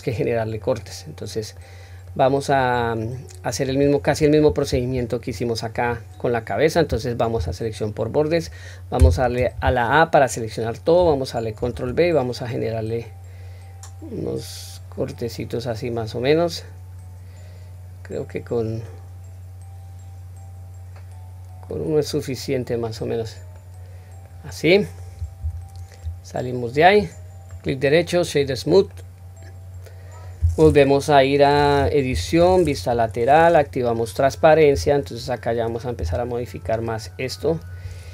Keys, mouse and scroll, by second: 0.9-1.6 scroll down 1, 1.6-2.1 middle drag, 1.6 scroll down 1, 3.0-3.5 middle drag, 11.6 ctrl+b, 22.1-22.9 middle drag, 23.1-23.6 scroll down 1, 23.6-24.3 middle drag, 24.6-25.1 middle drag, 25.4 Tab, 26.3 middle click, 26.3 scroll down 1, 27.5-28.9 right drag, 28.9-30.2 middle drag, 32.1 Tab, 32.9 KP_3, 33.6 scroll up 1, 34.7 q, 36.0 1, 36.6-37.4 drag.